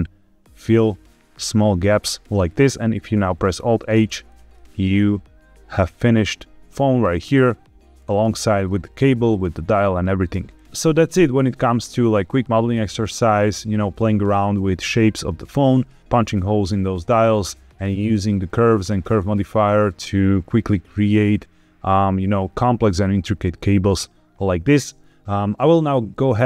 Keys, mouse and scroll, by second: 2.2 click, 3.5 alt+h, 4.2 click, 4.5-7.1 middle drag, 7.2 scroll down 2, 7.9-8.4 scroll up 2, 8.5 shift+middle click, 10.0 middle click, 10.5 scroll up 1.